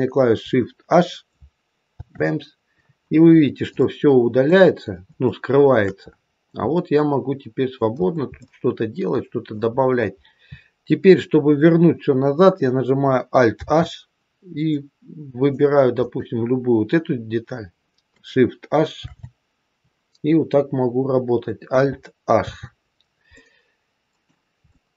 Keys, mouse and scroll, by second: 1.9 shift+h, 3.3-3.8 scroll up 2, 3.8 middle click, 5.2 shift+middle click, 6.0-6.7 scroll up 5, 6.7 middle click, 9.6 middle click, 9.6-11.3 scroll down 7, 11.3-12.9 scroll down 2, 13.5 alt+h, 14.6 middle click, 15.9 click, 18.9 shift+h, 22.3 alt+h, 23.3 middle click, 24.7 middle click.